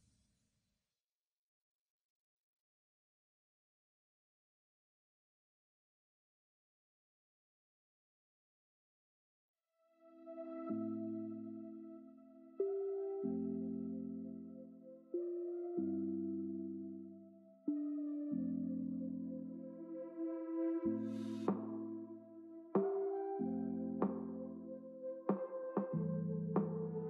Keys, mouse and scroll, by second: 0.2 Left, 1.3 click, 3.1 click, 4.5-6.1 drag, 8.3-8.6 drag, 9.6 click, 9.8-11.1 middle drag, 19.7-22.2 drag, 25.9-27.0 drag.